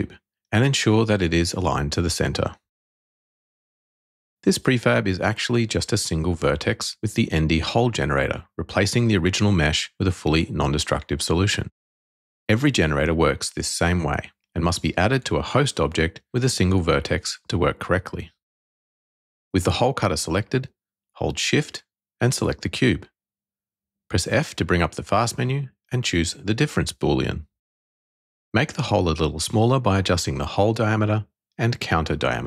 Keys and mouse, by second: 0.0-1.2 drag, 3.7 middle click, 4.6-5.5 shift+middle drag, 6.8 middle click, 7.7 click, 9.7-11.3 drag, 11.4-12.5 drag, 16.5 n, 20.9 shift+middle click, 22.9 f, 28.7-30.1 drag, 31.0-32.4 drag.